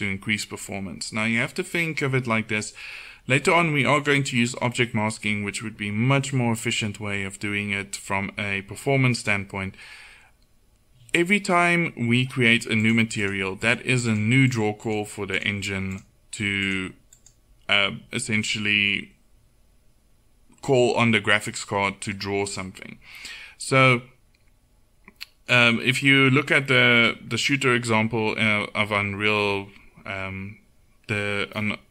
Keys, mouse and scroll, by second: 12.9-31.9 drag.